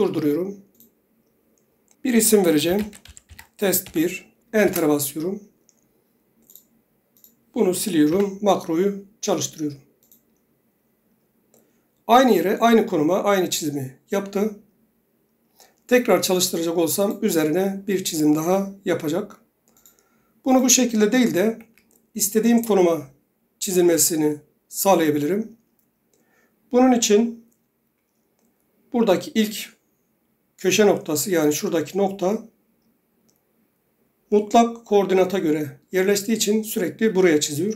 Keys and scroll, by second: 2.6-4.0 typing, 4.8 Return, 8.2 Delete, 21.7 Escape.